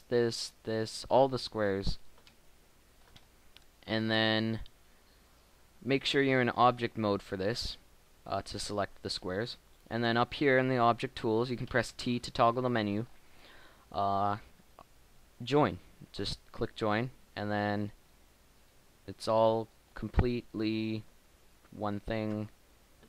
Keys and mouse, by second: 2.3 middle click, 3.8 shift+middle click, 4.6-6.1 shift+middle drag, 12.0 t, 19.2 g, 21.4 Tab, 22.3 Tab.